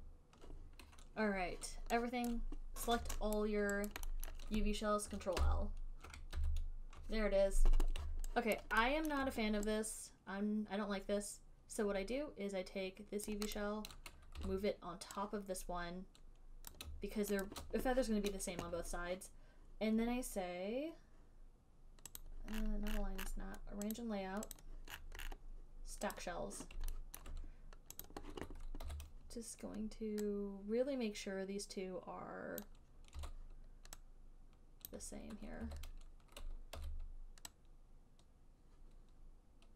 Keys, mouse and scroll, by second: 0.1 ctrl+right click, 1.1 ctrl+u, 2.6 click, 3.7 alt+click, 4.2 alt+right click, 4.6 alt+middle click, 5.7 ctrl+l, 6.7 ctrl+l, 8.5 ctrl+i, 8.9 alt+right click, 9.4 alt+middle click, 13.5 right click, 13.8 click, 14.7 w, 17.0 click, 17.8 shift+click, 22.5 click, 22.9-24.3 scroll down 11, 24.3 click, 24.9 click, 24.9-26.4 scroll, 26.4 click, 26.4 scroll, 26.6 middle click, 27.5 alt+middle click, 28.4 click, 29.2 e, 32.7 e, 32.9 click, 33.5 click, 33.5 w, 35.2 click, 35.9 w, 37.1 e.